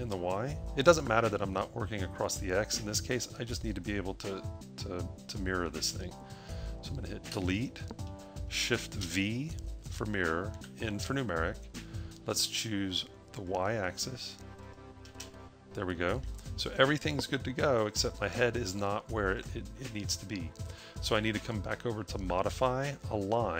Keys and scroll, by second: 7.4 Delete, 8.8 shift+v, 10.4 n, 11.4 n.